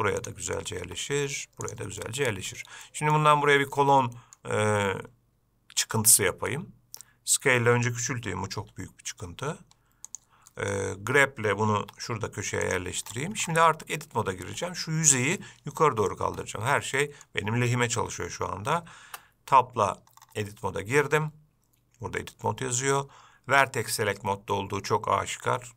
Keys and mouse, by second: 1.0 g, 2.2-2.7 middle drag, 3.1 middle click, 4.2-4.6 middle drag, 8.8 s, 10.7 middle click, 12.0 g, 17.2 middle click, 19.3 Tab.